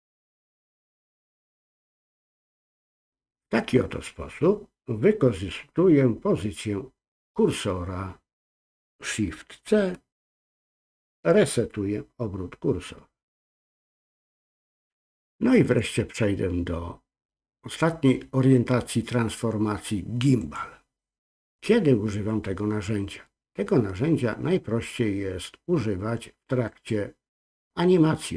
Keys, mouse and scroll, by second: 10.3 shift+c, 12.8-14.7 scroll down 2, 15.6-23.3 drag.